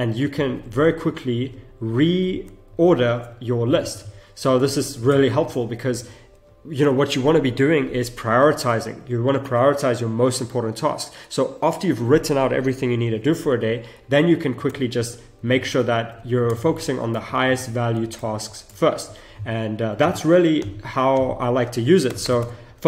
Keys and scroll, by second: 0.3 ctrl+shift+Down, 0.6 ctrl+shift+Down, 1.0 ctrl+shift+Up, 1.4 ctrl+shift+Up, 2.2 ctrl+shift+Down, 2.7 ctrl+shift+Up, 3.5 Down, 4.0 ctrl+shift+Up, 5.2 ctrl+shift+Up, 5.7 Down, 14.5 Down, 15.4 ctrl+shift+Up, 16.0 Down, 16.6 ctrl+shift+Up, 17.2 Down, 18.3 ctrl+shift+Up, 19.0 Down, 22.0 Return.